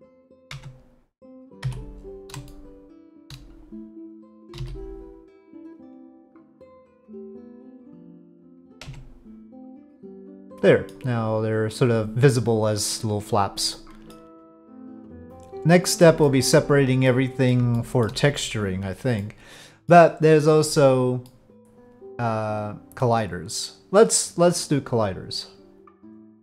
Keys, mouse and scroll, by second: 0.5 Tab, 1.6 3, 1.8 click, 2.5 shift+click, 2.8 shift+middle click, 4.5 s, 8.8 Tab, 10.2-10.9 drag, 11.9 click, 12.3 drag, 12.5-12.9 middle drag, 13.7-14.1 middle drag, 14.8-15.9 middle drag, 16.2 shift+middle drag, 17.0-17.5 middle drag, 17.7 shift+middle drag, 17.8 shift+click, 17.9 shift+middle click, 19.2-19.9 middle drag, 21.2-23.0 middle drag.